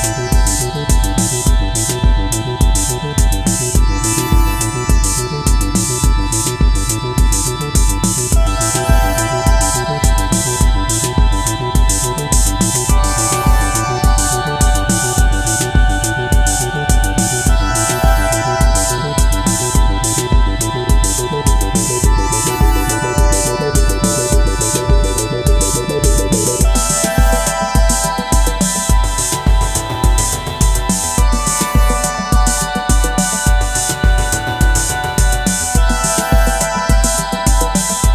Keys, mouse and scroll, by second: 3.4 double click, 8.4-11.6 scroll down 1, 13.1 alt+click, 21.2-22.0 typing, 23.5 typing, 28.0-29.1 typing, 30.7 typing, 34.7-35.1 typing.